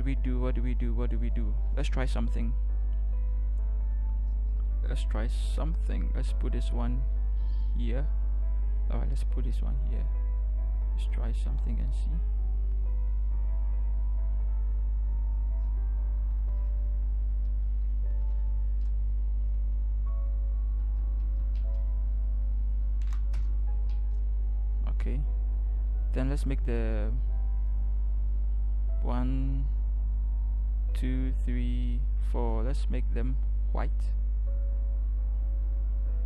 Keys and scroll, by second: 18.4 v, 20.8 ctrl+t, 23.3 Return.